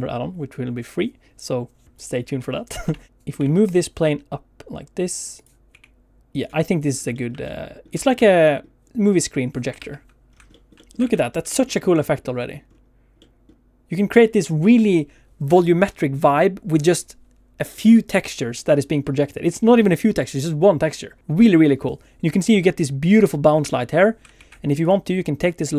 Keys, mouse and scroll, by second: 3.1 g, 3.3 z, 5.3 click, 5.6 s, 6.3 click, 6.8 scroll up 2, 7.1 shift+middle click, 7.4 middle click, 7.9 shift+middle click, 8.1 middle click, 23.6 ctrl+space, 24.3 alt+shift+z, 24.7 click, 25.6 middle click.